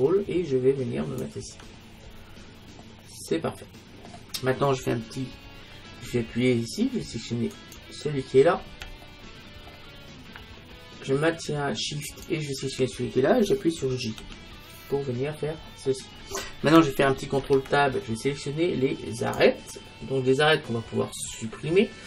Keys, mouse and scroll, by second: 2.1 middle click, 2.9-4.7 scroll down 1, 5.5-7.6 middle drag, 7.6-9.5 right drag, 8.3-9.4 middle drag, 9.5-12.1 middle drag, 12.1-14.0 right drag, 14.3 j, 15.0 middle click, 15.6-16.9 scroll down 1, 16.9 scroll up 1, 17.0 middle click, 17.5 ctrl+Tab.